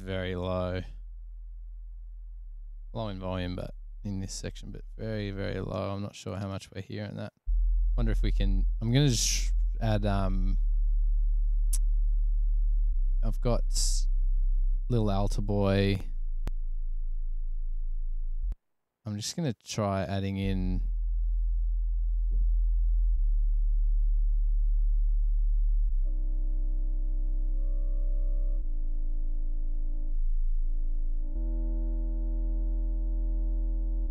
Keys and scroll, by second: 0.3 super+=, 3.0 super+=, 5.8 space, 6.5 space, 7.3 super+=, 18.6 space, 19.4 space.